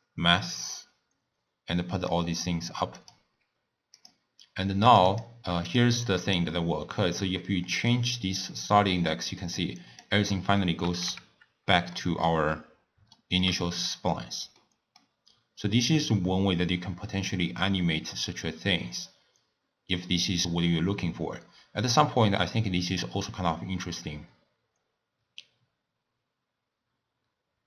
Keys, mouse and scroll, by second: 0.6-3.1 drag, 4.0 drag, 4.9 click, 6.3-9.4 drag, 10.6 middle click, 11.1 KP_0, 12.0 middle click, 12.5-13.2 scroll up 4, 13.2-13.6 shift+middle drag, 13.6-14.6 scroll down 4, 14.6-15.9 middle drag, 15.9-18.9 drag.